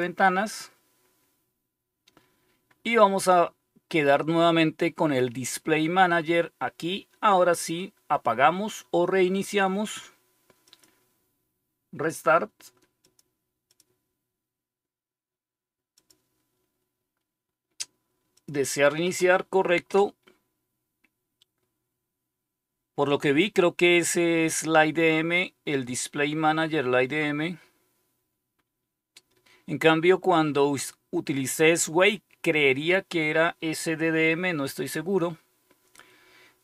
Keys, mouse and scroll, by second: 10.6 click, 12.9 click, 15.9 click, 18.3 click.